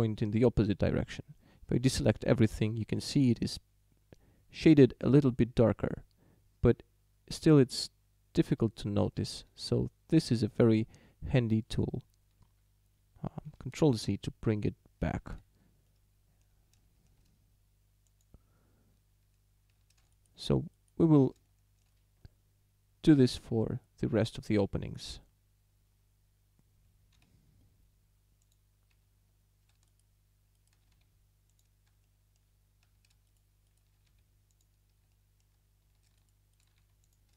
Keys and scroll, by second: 1.9 a, 13.9 ctrl+z, 19.7 a, 27.2 w, 28.9 a, 31.0 w, 32.9 a, 34.1 w, 35.8 a, 36.8 w.